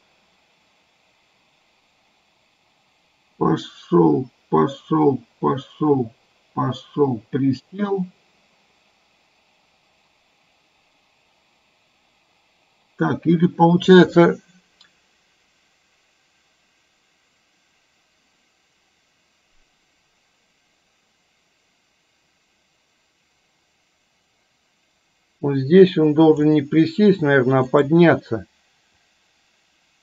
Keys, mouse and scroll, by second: 27.8 click, 29.0 click, 29.3-30.0 drag.